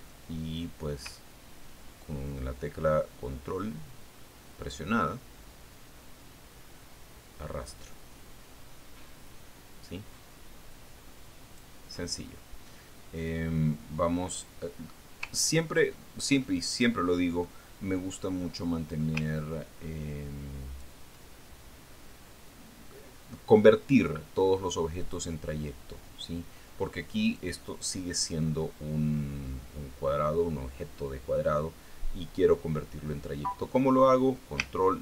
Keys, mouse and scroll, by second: 2.6-13.3 ctrl+drag, 16.1 scroll down 2, 16.9 ctrl+scroll up 2, 17.4-19.1 ctrl+middle drag, 20.4-22.5 ctrl+drag, 26.5 click, 28.8 click.